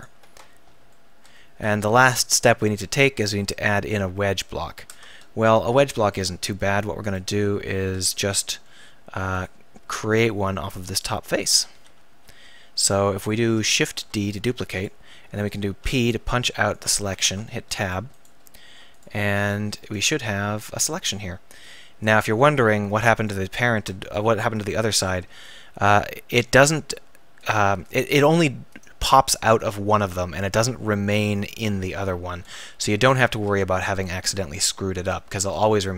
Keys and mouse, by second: 4.9 Tab, 8.3 click, 8.6 click, 12.2 KP_1, 13.8 shift+d, 15.4-16.9 drag, 15.8 p, 17.3 Tab, 17.7 right click, 21.6-22.7 drag, 22.7 ctrl+z, 23.7 Tab, 27.4-31.4 drag, 31.9 z, 32.4 Tab, 32.9 Tab, 33.3 z.